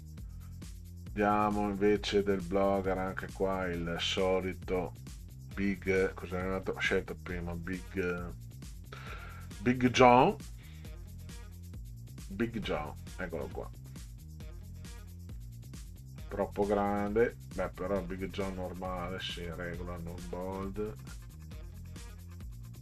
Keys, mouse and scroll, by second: 2.8-3.8 drag, 5.0 click, 7.4 scroll down 2, 10.1 click, 13.7 scroll down 2, 14.9 click, 16.9 click, 17.6 scroll up 2, 19.7 scroll down 2, 22.5 click.